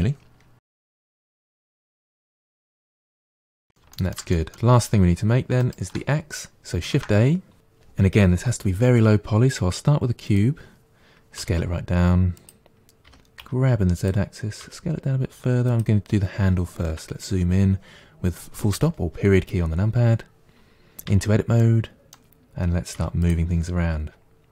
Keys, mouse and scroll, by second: 0.2 KP_Divide, 0.4 KP_Divide, 0.5 middle click, 0.9 g, 1.2 middle click, 2.0 middle click, 2.2 Tab, 2.4 z, 2.5 scroll down 2, 2.5 middle click, 2.7 click, 2.8 middle click, 2.9 g, 3.0 middle click, 3.2 click, 3.3 g, 3.5-5.5 middle drag, 5.5 shift+right click, 6.8 shift+a, 11.2 s, 12.9 g, 14.5 s, 16.8 KP_Decimal, 17.6-20.2 scroll down 9, 21.0 Tab, 21.4-22.8 middle drag, 22.8 3, 23.1 click, 24.3-24.5 scroll down 7.